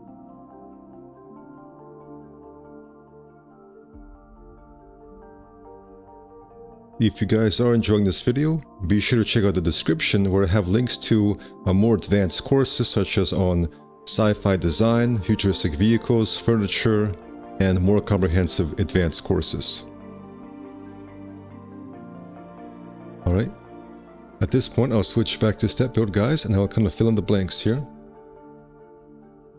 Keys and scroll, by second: 4.8 ctrl+z, 5.8 ctrl+z, 10.1 space, 12.2 F4, 12.9 F4, 14.8 a, 20.0 ctrl+z, 21.2 ctrl+z, 25.2 ctrl+1.